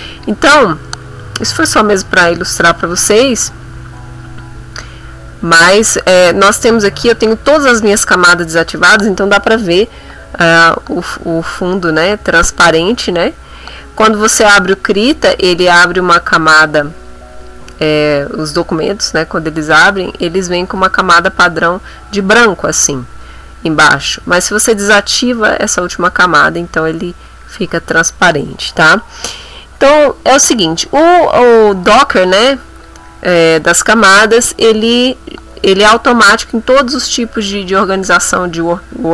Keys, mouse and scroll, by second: 0.1 click, 2.2 click, 3.2 ctrl+middle click, 3.6-4.8 ctrl+middle drag, 4.9 ctrl+middle click, 14.8 click, 15.4-16.8 drag, 16.8 click, 17.3 click, 18.0 click, 19.0 click, 20.0 click, 20.8 click, 24.8 click, 25.8 click, 27.4 click, 32.8 click, 38.0 click.